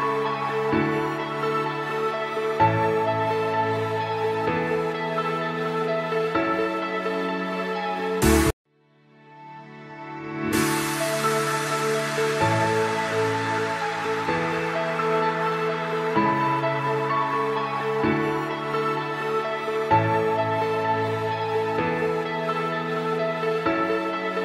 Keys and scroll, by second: 1.1 F3, 1.7 F2, 3.7 F3, 12.7 F3, 14.7 F4, 17.7 shift+F2, 17.9 F3, 23.3 ctrl+Page_Down.